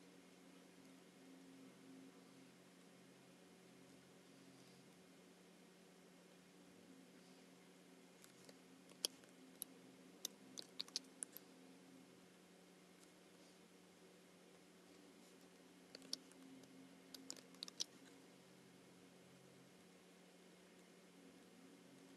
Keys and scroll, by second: 8.9 super+c, 10.8 alt+super+b, 17.6 alt+super+b.